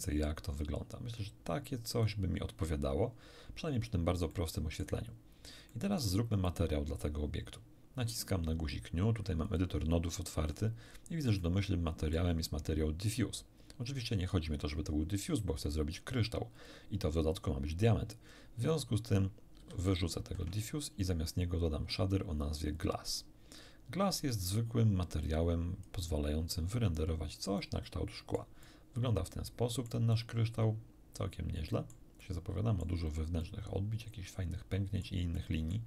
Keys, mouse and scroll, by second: 3.4-4.0 scroll up 2, 4.3 shift+middle click, 5.2 shift+scroll down 1, 5.7 shift+middle click, 6.4 shift+click, 9.4 click, 10.4-10.8 scroll up 1, 11.4 middle click, 16.6 click, 17.3-18.9 drag, 19.6 x, 20.2 shift+a, 22.8 click, 24.4 click, 25.2-26.0 drag, 27.6-28.6 middle drag, 29.0-30.0 middle drag, 30.5-32.1 middle drag, 32.2 middle click, 33.4-35.2 middle drag, 35.4 middle click.